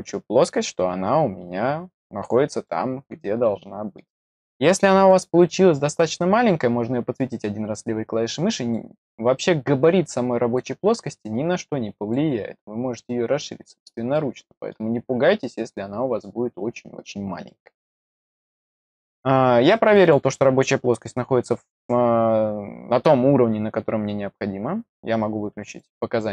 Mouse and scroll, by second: 2.6-3.9 middle drag, 5.0 click, 6.4-8.7 drag, 9.8-10.5 drag, 11.2 click, 12.8 click, 14.1 middle click, 15.6-16.1 drag, 17.4-18.4 middle drag, 20.0 click, 25.6 click.